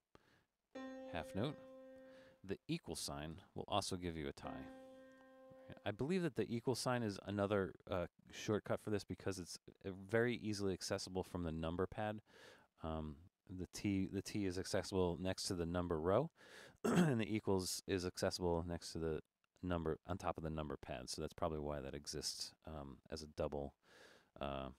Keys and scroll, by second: 0.0 BackSpace, 1.8 6, 3.4 =, 5.3 4, 22.8 Left, 24.0 Left.